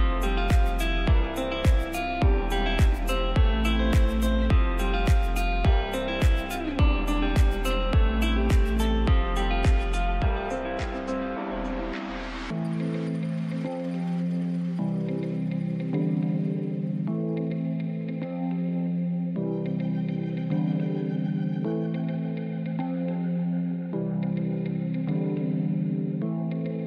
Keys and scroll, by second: 4.3 shift+Page_Down, 5.3 Escape, 17.7 space, 18.2 Escape, 19.2 F4, 19.6 Escape, 22.2 F2, 22.9 shift+Page_Down, 23.5 Escape, 23.8 F4, 25.3 c.